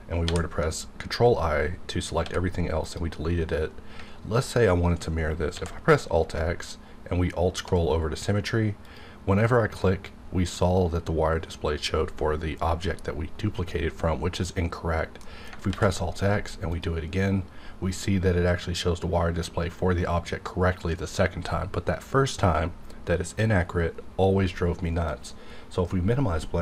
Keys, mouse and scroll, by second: 0.3 ctrl+i, 2.2 x, 2.8 click, 5.5 alt+x, 6.5-7.2 alt+scroll down 2, 7.2-7.7 alt+scroll up 2, 8.8 click, 8.9 click, 14.7 click, 15.2 middle click, 15.6 alt+x, 16.7 click, 25.1 click.